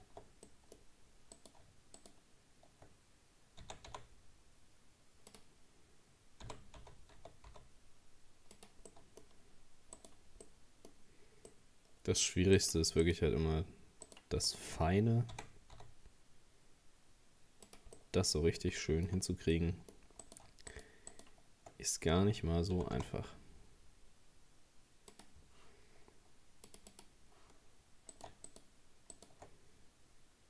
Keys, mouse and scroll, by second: 0.1 Tab, 0.5 middle click, 0.8 scroll up 1, 1.4 right click, 2.0 shift+right click, 3.6 r, 6.5 g, 8.9 middle click, 9.4-9.7 scroll up 2, 10.0 right click, 10.5-12.6 middle drag, 12.6 right click, 13.0 shift+right click, 14.1 shift+right click, 14.5 shift+right click, 15.3 r, 18.0-20.2 middle drag, 20.2 right click, 20.7 shift+right click, 21.1 shift+right click, 22.8 g, 26.7-28.1 drag, 28.1 right click, 28.5 shift+right click, 29.1 shift+right click.